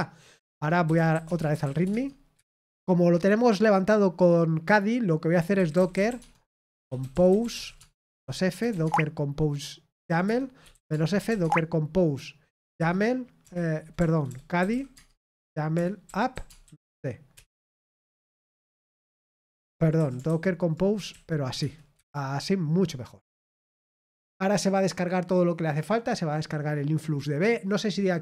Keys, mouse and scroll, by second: 1.9-2.3 typing, 7.0-9.1 typing, 11.2 typing, 11.4 Tab, 13.9-17.2 typing, 17.3 Return, 19.9 ctrl+a, 20.2 alt+f, 21.1 Right, 21.4 BackSpace, 21.5 space, 21.9 Return.